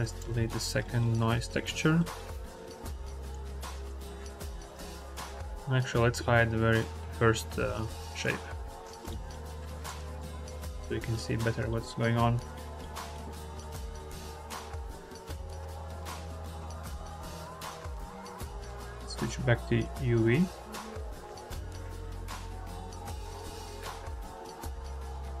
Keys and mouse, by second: 0.8 click, 1.4 x, 1.9 click, 3.2-3.8 drag, 4.2 click, 5.3 click, 7.4 h, 9.1 click, 9.7 click, 10.1 click, 11.2 click, 12.1 middle click, 12.4 middle click, 12.8 middle click, 14.1 middle click, 17.1 middle click, 18.1-19.8 drag, 22.7-23.8 drag.